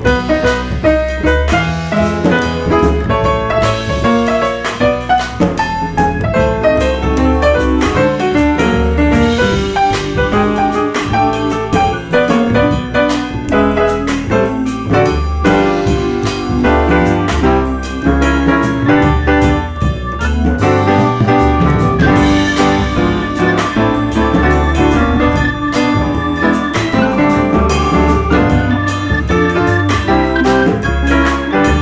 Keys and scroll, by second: 0.8 F4, 2.3 p, 3.2 F4, 4.5 F4, 5.4 F4, 7.2 F4, 7.4 2, 10.5 F4, 11.5 F4, 12.5 F4, 13.4 F4, 14.7-15.6 typing, 16.8 F4, 18.9 4, 22.5 F4, 24.0 F4, 26.2 F4, 27.0 F4, 28.1 2, 31.0 F4, 31.5 r.